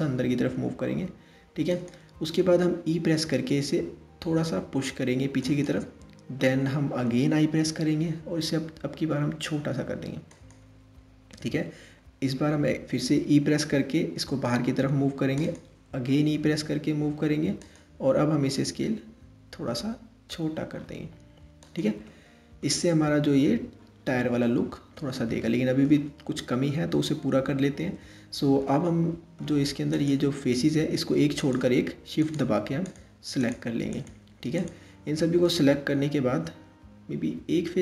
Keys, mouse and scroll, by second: 2.8 e, 7.1 i, 11.2 e, 15.7 e, 17.9 s, 21.7-22.5 middle drag, 22.5 Tab, 24.1-26.2 middle drag, 26.2 Tab, 28.3-29.6 middle drag, 29.6 click, 31.1 shift+click, 31.8 shift+click, 32.5 shift+click, 33.0 shift+click, 33.5 shift+click, 34.2 shift+click.